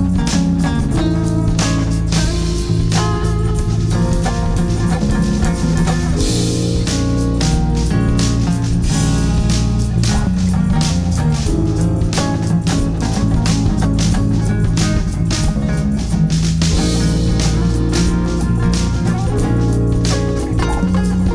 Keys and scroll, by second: 4.6 Escape, 5.2 F3, 5.7 Escape, 7.9 F2, 10.8 F3, 11.5 Escape, 13.6 F2, 16.0 Escape, 19.8 shift+F2, 20.5 F9.